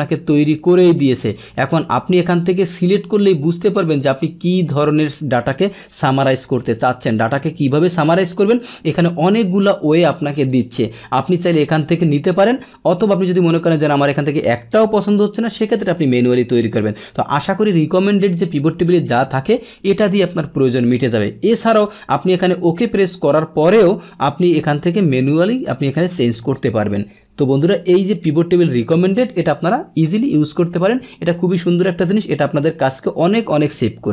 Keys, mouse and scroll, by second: 0.4 click, 1.5 click, 2.4 click, 3.0 click, 4.0 click, 5.3 click, 6.1 click, 7.1-7.8 drag, 8.1 click, 10.0 click, 10.4 click, 11.5 click, 12.7-14.0 drag, 14.6 click.